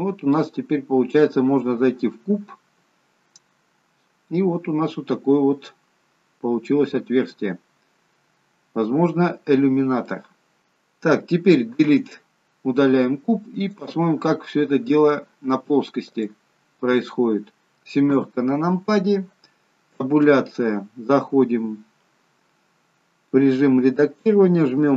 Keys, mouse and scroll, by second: 0.6 scroll up 2, 1.0 middle click, 5.6-6.3 scroll up 1, 6.5-7.2 scroll down 1, 7.2-8.4 scroll down 5, 8.4 scroll down 2, 8.6-10.0 scroll up 6, 10.0 middle click, 10.0-10.6 scroll up 2.